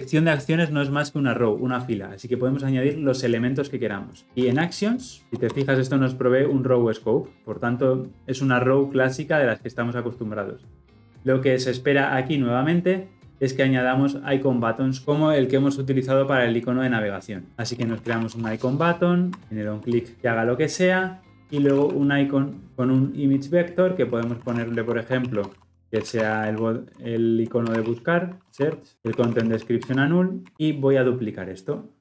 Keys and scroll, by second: 5.2 Return, 19.4 Return, 31.9 ctrl+v.